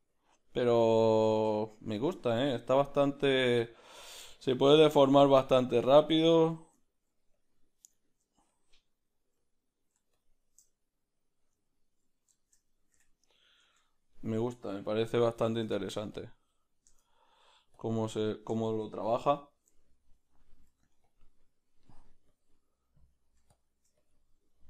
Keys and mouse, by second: 0.5-2.2 middle drag, 6.8 ctrl+middle click, 10.8 middle click, 11.7-13.0 drag, 12.4 shift+middle click, 13.0-14.1 middle drag, 13.0 \, 13.8 Tab, 14.1 right click, 14.7 \, 14.9 \, 15.2-17.8 middle drag, 16.2 Tab, 16.2 b, 17.8-21.1 drag, 18.1-19.7 middle drag, 21.1 middle click, 21.1 f, 21.9-24.6 drag.